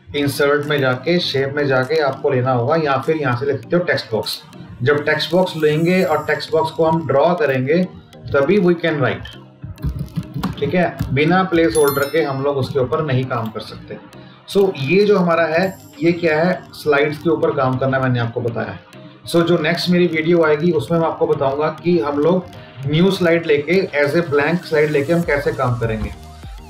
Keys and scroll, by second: 10.3 space.